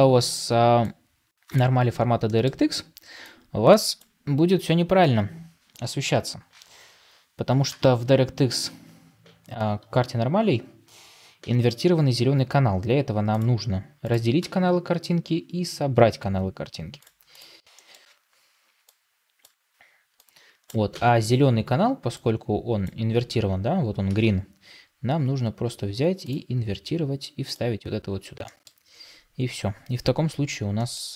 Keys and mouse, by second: 18.7-31.1 drag.